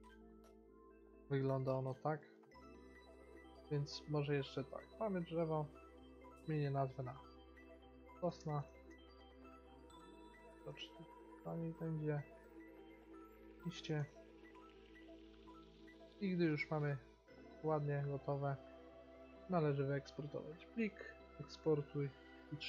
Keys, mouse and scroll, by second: 4.6-8.2 drag, 10.5 BackSpace, 12.4-14.9 drag, 15.8-16.8 middle drag, 18.3-20.3 drag, 20.7 click, 21.9 click.